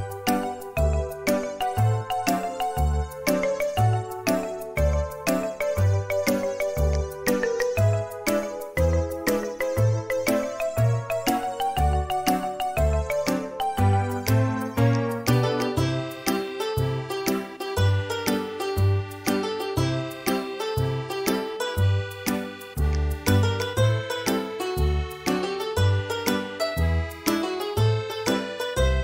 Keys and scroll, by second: 11.8 m, 14.7 space, 17.8 p, 20.7 space.